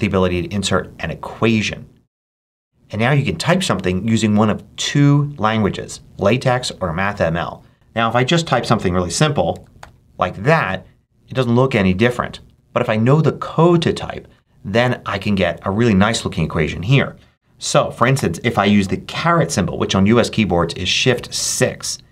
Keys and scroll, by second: 8.8-10.5 typing, 18.0 7, 21.4 shift+6.